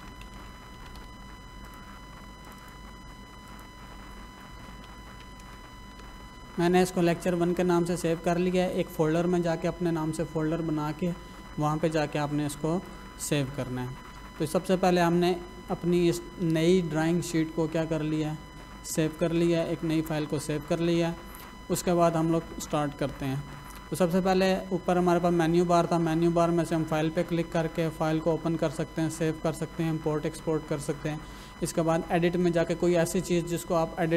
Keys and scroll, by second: 0.0-1.4 typing, 4.3-5.8 typing.